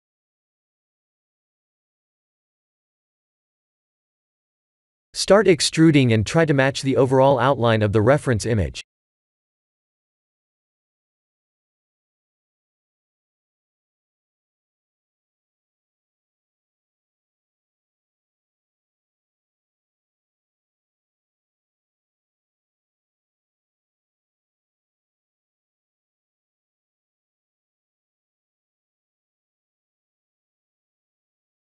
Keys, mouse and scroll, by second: 0.1 middle click, 0.5 middle click, 0.9 middle click, 1.1 Tab, 2.0 KP_1, 2.0 KP_0, 2.6 KP_3, 3.3 KP_1, 4.0 scroll up 3, 4.5 e, 6.1 s, 7.0 g, 8.1 e, 9.4 s, 11.3 g, 14.8 e, 15.9 s, 17.7 g, 22.3 e, 24.4 s, 28.3 Tab, 28.7 middle click, 30.7 1, 31.5 Tab.